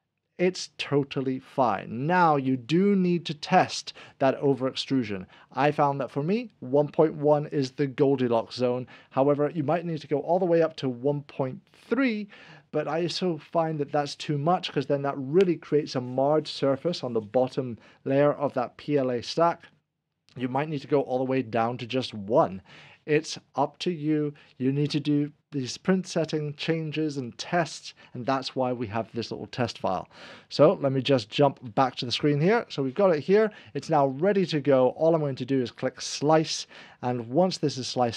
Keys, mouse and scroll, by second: 31.5 click, 31.6 1, 35.6 alt+4, 35.6 1, 35.7 click.